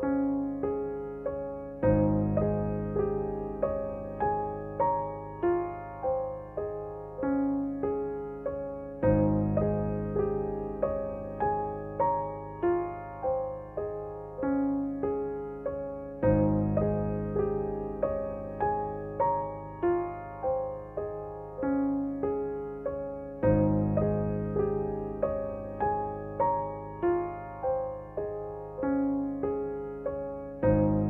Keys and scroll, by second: 7.3 g, 10.3 Page_Up, 10.6 Page_Up, 12.4 Page_Down, 14.9 r.